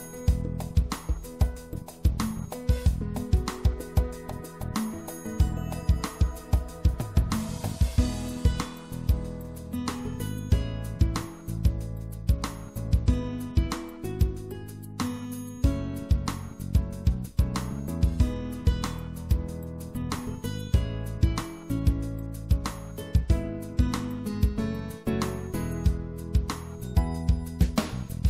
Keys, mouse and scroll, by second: 0.9-3.4 right drag, 9.7-10.9 middle drag, 9.8-11.6 drag, 11.9 i, 17.4-19.3 drag, 19.3 middle click, 25.7-27.7 drag, 26.7-28.2 right drag.